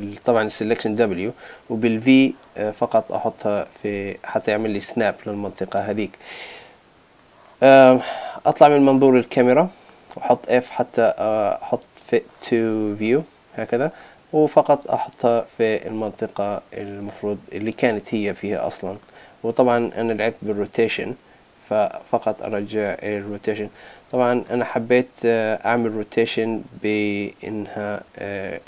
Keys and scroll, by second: 23.8 super+z.